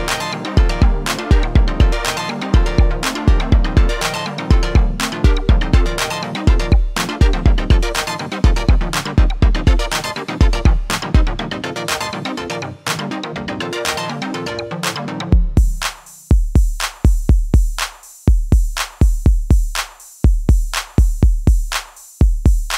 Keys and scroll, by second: 2.3 ctrl+r, 10.1 ctrl+r, 15.6 ctrl+r, 20.6 ctrl+r.